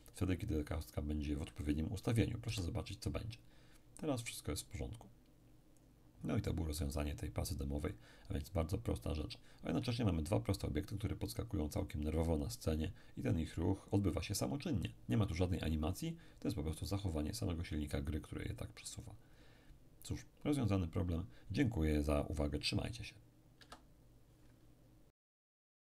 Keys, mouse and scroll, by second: 2.5 p, 23.6 Escape.